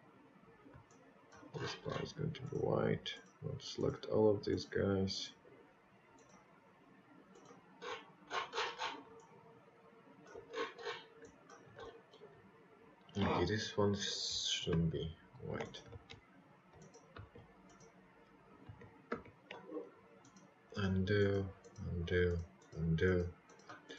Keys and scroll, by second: 2.2 ctrl+z, 3.7 ctrl+z.